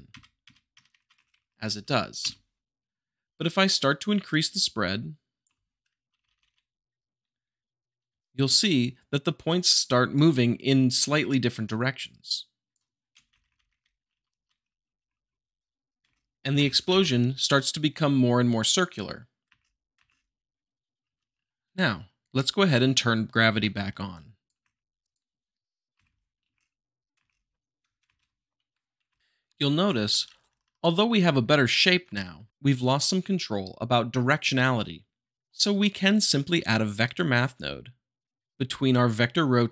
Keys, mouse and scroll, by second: 0.7 Right, 1.1 Left, 4.2-5.3 drag, 5.4 Up, 6.0 Right, 11.6-12.7 drag, 13.3 Right, 14.9 Left, 16.5 space, 16.8 shift+Left, 19.4 space, 21.0 alt+Tab, 22.3-23.3 shift+middle drag, 23.5-24.1 shift+middle drag, 24.1-24.6 drag, 24.6 g, 25.0 click, 25.9 m, 26.5 space, 28.0 shift+Left, 29.2 Left, 29.8 Right, 31.0 Left, 35.4-36.1 shift+middle drag, 36.4 q, 37.0-38.1 drag.